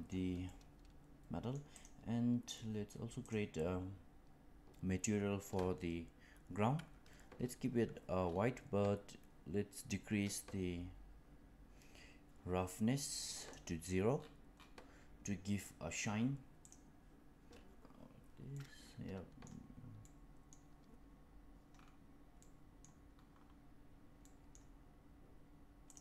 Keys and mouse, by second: 0.4-1.5 middle drag, 3.2 click, 9.8-13.4 drag, 18.5-19.5 middle drag, 20.0-20.4 middle drag, 22.3-22.8 middle drag, 24.3 middle click, 25.8 click.